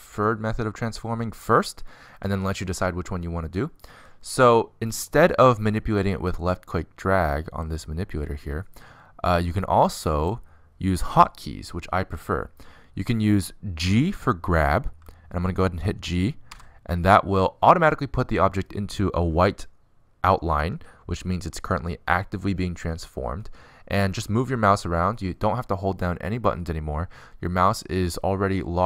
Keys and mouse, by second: 8.1-9.8 drag, 10.0-17.0 middle drag, 17.0 g.